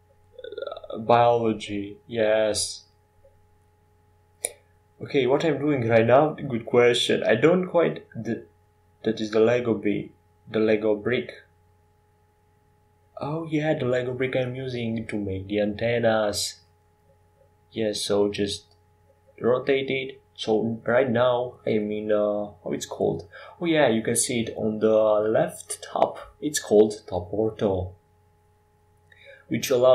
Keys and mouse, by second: 1.7 shift+d, 3.0-5.9 right drag, 3.3 shift+d, 5.9 KP_1, 10.8 g, 18.5-20.4 drag, 21.2 KP_5, 26.2 ctrl+j.